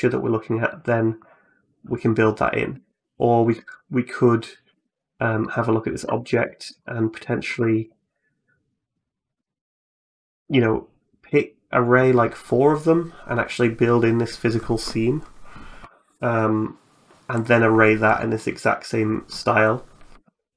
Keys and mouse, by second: 0.1 middle click, 0.8 right click, 2.6 Tab, 3.2 Tab, 3.5 right click, 4.5 Tab, 4.8 right click, 5.2 middle click, 5.8 Tab, 6.3 shift+click, 6.6 middle click, 7.3 Tab, 9.1 click, 18.2 middle click, 20.1 shift+middle click.